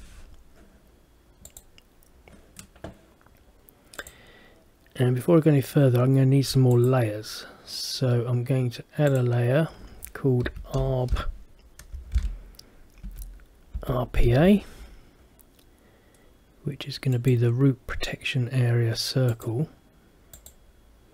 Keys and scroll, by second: 12.3 shift+-.